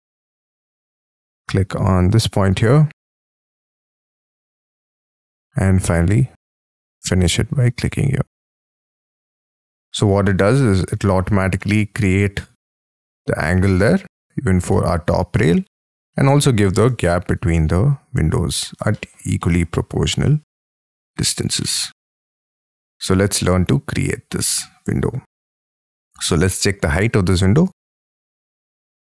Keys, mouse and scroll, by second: 0.1 scroll down 7, 0.3-2.3 scroll up 37, 2.3-3.6 scroll down 15, 3.8 middle click, 3.9 scroll down 3, 4.0 middle click, 4.6 scroll up 16, 9.8 middle click, 10.7 scroll down 2, 10.9 space, 11.3 scroll up 4, 11.7 middle click, 13.7 middle click, 14.1 middle click, 14.2-14.7 scroll up 10, 14.7 middle click, 15.8 scroll up 5, 16.0 middle click, 16.4-16.9 scroll down 7, 17.1 shift+middle click, 18.0-18.9 scroll down 18, 18.9 shift+middle click, 19.4 shift+middle click, 20.2 middle click, 20.8 shift+scroll down 6, 21.2 shift+middle click, 21.6 shift+middle click, 22.0 shift+middle click, 22.2 shift+middle click, 22.4 shift+middle click, 23.6-24.1 scroll down 13, 25.7 scroll down 4, 26.1-27.0 scroll up 18, 27.1 t, 28.3 Up.